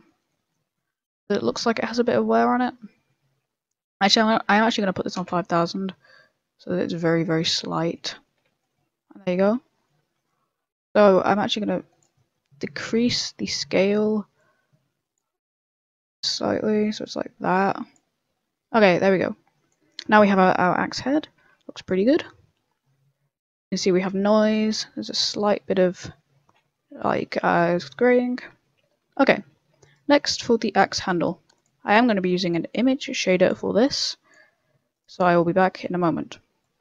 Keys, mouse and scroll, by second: 0.0 middle click, 0.5 middle click, 1.0 scroll up 2, 1.2 middle click, 2.7-3.5 scroll up 6, 2.9 middle click, 3.9 click, 4.6 0, 5.8-6.1 scroll down 9, 5.8 0, 6.2 middle click, 6.8 middle click, 7.6 scroll down 1, 7.7 middle click, 8.0 middle click, 8.9 scroll down 1, 8.9 a, 9.0 middle click, 9.6 scroll up 2, 10.7 middle click, 11.1 click, 12.1 middle click, 12.8 middle click, 13.6 middle click, 14.3 click, 15.2 click, 18.9 click, 20.3 middle click, 20.7 middle click, 23.1 scroll up 3, 23.3 middle click, 23.7 shift+middle click, 23.7 shift+middle click, 24.0 scroll down 3, 24.2 middle click, 25.1 right click, 25.4 middle click, 26.6 scroll up 3, 27.7-28.2 scroll down 3, 27.7 middle click, 28.4 a, 28.4 middle click, 28.8 shift+middle click, 29.2 middle click, 29.8 right click, 30.1 shift+middle click, 31.0 click, 31.5 click, 32.8 click, 34.5 click, 34.5 b, 35.1 n, 36.6 click.